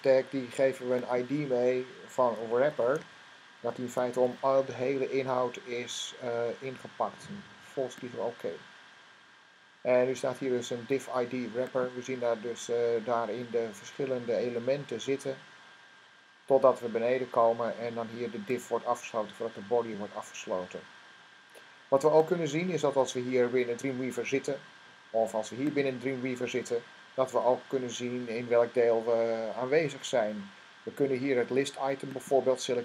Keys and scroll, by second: 2.0-4.6 typing.